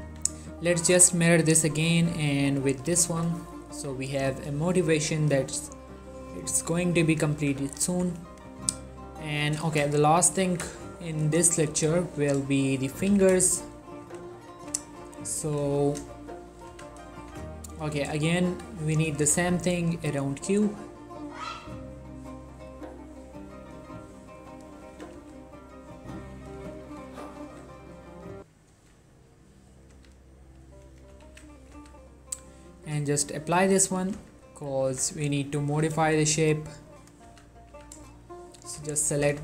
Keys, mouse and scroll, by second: 0.2 q, 0.8 click, 3.6 ctrl+middle click, 4.8-7.5 middle drag, 7.5 1, 8.2-8.9 ctrl+middle drag, 9.0 shift+middle drag, 9.2 shift+scroll down 2, 9.5-9.9 shift+middle drag, 10.0-10.8 ctrl+middle drag, 10.8-11.6 shift+middle drag, 11.6 3, 12.2 shift+middle click, 13.2 z, 13.5 shift+middle click, 14.1 z, 14.8 z, 15.5 z, 16.1 shift+middle click, 16.4-16.8 ctrl+middle drag, 16.8 z, 17.4 z, 18.5 shift+right click, 18.8-19.3 scroll down 2, 19.5 shift+a, 20.2 click, 24.5 right click, 25.0 s, 25.3 z, 26.4 click, 27.0 right click, 27.2 click, 27.5 s, 28.0 click, 28.8 s, 29.8 click, 30.0 z, 30.9 ctrl+middle click, 31.3 ctrl+a, 31.6 click, 31.8 z, 33.1 click, 34.3 z, 35.0 Tab, 35.6 ctrl+middle click, 36.2 shift+middle click, 36.9 click, 37.4 z, 37.8 z, 38.4 shift+click, 38.9 shift+z, 39.3 s.